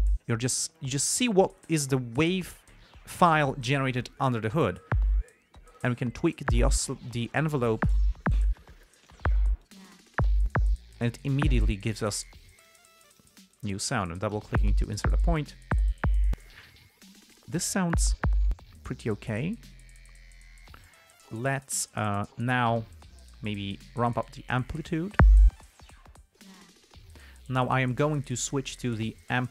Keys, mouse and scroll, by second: 6.1 click, 7.4-8.1 drag, 8.9-9.6 drag, 9.9 click, 11.1 click, 12.5 click, 12.9 click, 13.3 click, 13.8-14.8 drag, 19.3 click, 23.9-25.5 drag.